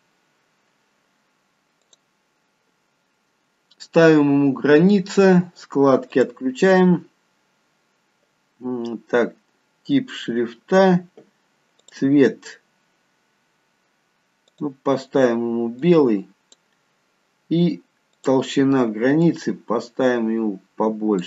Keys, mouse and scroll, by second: 1.9 click, 6.2 click, 10.3-11.3 scroll down 1, 11.3-11.9 scroll down 2, 11.9 click, 15.2 click, 18.2 click, 19.3 click.